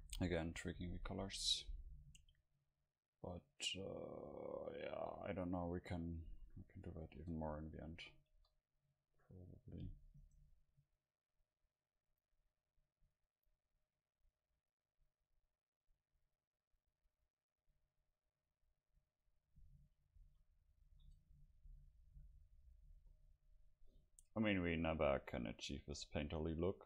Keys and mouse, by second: 6.4 a, 6.6 a, 7.1 ctrl+s, 8.1 Right, 9.4 KP_0, 10.4-13.9 right drag, 12.1-15.8 drag, 20.3 a, 20.9 ctrl+s, 22.3 F12.